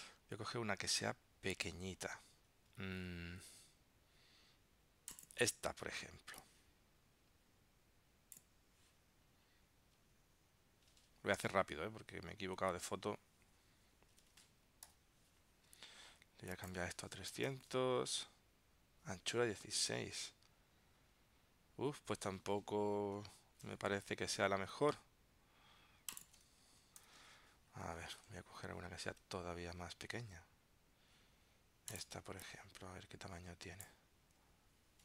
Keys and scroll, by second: 15.0 alt+super+i, 27.1 ctrl+alt+super+p, 27.9 super+w, 28.7 super+Tab.